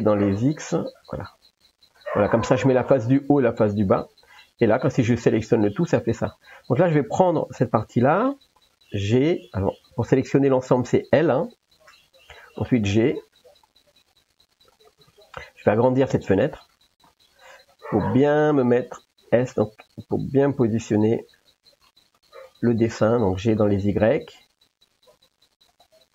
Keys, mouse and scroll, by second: 2.6 middle click, 3.4 middle click, 4.9 a, 6.6 click, 7.9 l, 11.3 l, 12.8 g, 16.3 ctrl+s, 17.1 middle click, 19.3 s, 22.2 middle click, 23.4 g.